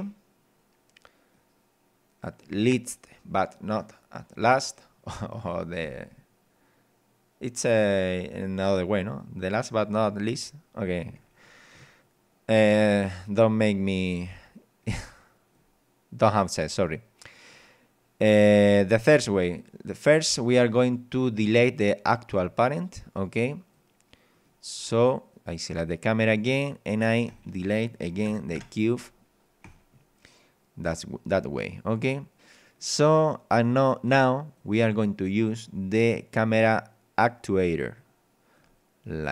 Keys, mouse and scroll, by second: 1.3-2.6 drag, 3.6 click, 12.7 scroll up 2, 13.0 scroll down 2, 14.8 click, 17.0 click, 23.0 click, 24.4 right click, 27.3 click, 28.2 BackSpace, 28.6 Return, 29.6 click, 31.4-33.0 middle drag, 34.2 click, 35.6 click, 37.3 click, 38.0 click, 39.2 scroll down 1.